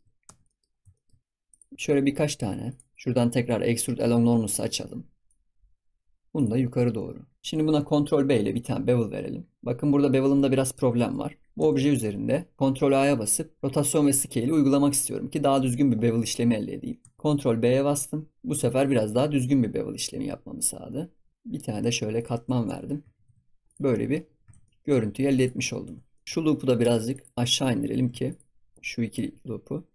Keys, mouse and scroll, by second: 0.0 shift+middle click, 0.0-1.4 scroll up 7, 0.2 Tab, 0.4 middle click, 0.9 shift+middle click, 1.4 click, 1.7 e, 3.4 click, 4.4 click, 6.3 click, 7.4 shift+middle click, 8.3 ctrl+b, 10.6 ctrl+b, 11.5 Tab, 12.9 ctrl+a, 16.9 Tab, 17.6 ctrl+b, 22.6 Tab, 22.8-23.1 scroll down 4, 23.1 ctrl+s, 23.4 scroll down 4, 23.6 click, 23.9-24.2 middle drag, 24.2 scroll up 4, 24.5 ctrl+s, 24.6-25.3 middle drag, 25.3 click, 25.6 Tab, 25.8 Tab, 25.9 scroll up 1, 26.1 shift+middle click, 27.1 click, 28.2 alt+shift+click, 28.6 alt+shift+click, 29.0 g.